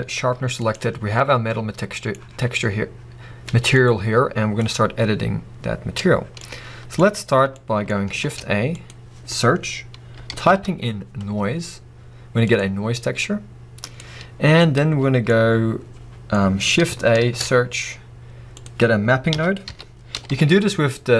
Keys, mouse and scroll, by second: 0.2 g, 0.7 right click.